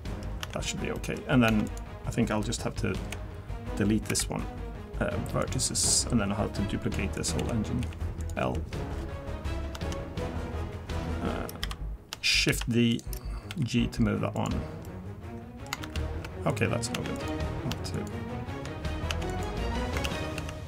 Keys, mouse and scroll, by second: 0.5 Tab, 0.6-0.9 scroll down 3, 0.9 middle click, 1.5 Tab, 1.7 click, 2.9 l, 4.1 Delete, 7.1 click, 7.4 l, 7.8 l, 8.2 click, 8.4 l, 11.6 KP_7, 12.6 shift+d, 13.5 g, 14.8 middle click, 15.8 ctrl+z, 16.5 click, 17.0 Tab, 17.1 click, 17.9 shift+click, 19.1 Tab, 19.3 click, 20.1 ctrl+z, 20.5 ctrl+z.